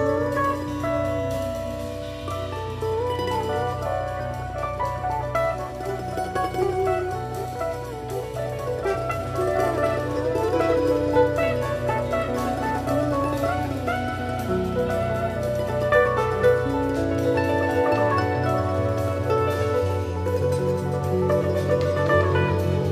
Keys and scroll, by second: 20.0 super+[, 21.3 super+c, 21.5 super+f, 22.0 shift+Down.